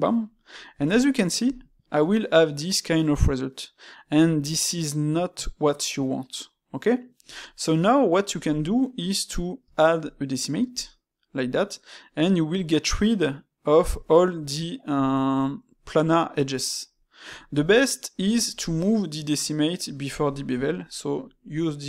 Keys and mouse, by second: 7.4-10.4 shift+middle drag, 16.9-20.7 middle drag.